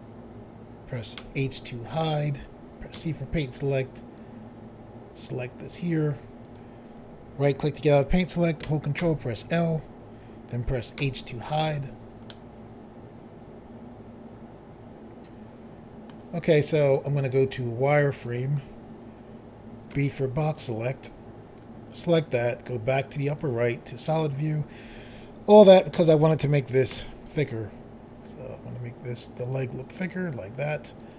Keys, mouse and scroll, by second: 1.1 h, 2.9 c, 4.1 click, 6.4 right click, 9.0 ctrl+l, 11.0 h, 12.3 middle click, 18.2 click, 19.9 b, 20.5 click, 23.2 click, 25.9 s, 26.9 x, 31.0 click.